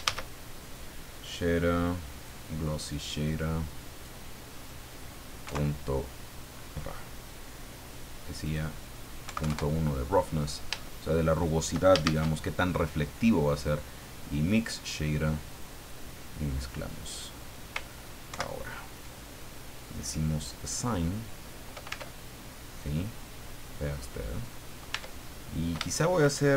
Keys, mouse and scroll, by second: 0.0 shift+a, 2.1 click, 3.9 click, 4.6 click, 5.4 KP_Decimal, 8.4 click, 9.2 KP_Decimal, 9.4 KP_1, 9.4 KP_Enter, 10.9 shift+click, 12.0 shift+a, 14.4 click, 15.5 click, 16.7 click, 18.3 ctrl+Right, 20.5 click, 21.3-21.6 scroll down 2, 21.9 Tab, 22.3-22.7 scroll down 2, 22.9-25.0 drag, 24.9 Tab, 25.3 scroll up 2.